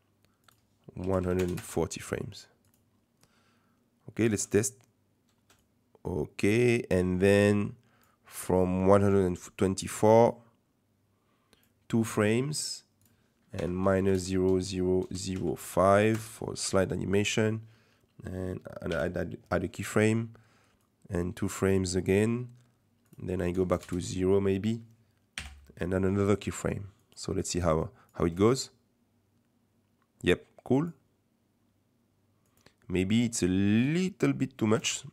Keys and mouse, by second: 0.6-2.1 drag, 2.6 click, 3.2-4.2 drag, 4.3 space, 5.4 space, 5.6-8.0 drag, 10.1-11.6 drag, 13.1-16.9 drag, 18.9 i, 20.8-21.9 drag, 23.1 click, 25.4 i, 27.0 click, 27.4 click, 27.8 click, 28.3 space, 30.8 click, 32.5 click, 33.7 click, 34.8 space.